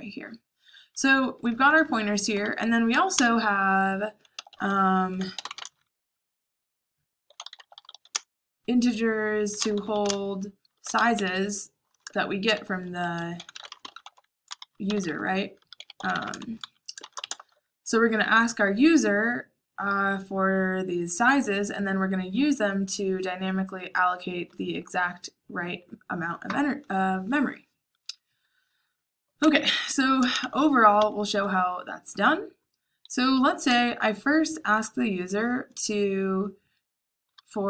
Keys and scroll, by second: 1.2-17.2 typing, 19.6 j, 29.3-30.2 typing, 30.9 Escape, 33.6 j, 35.6 j, 37.3-37.6 typing.